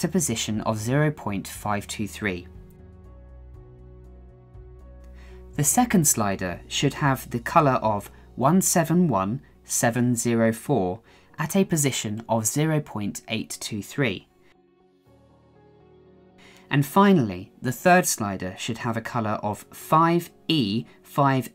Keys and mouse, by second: 5.6 click, 6.1 click, 18.5-20.1 drag.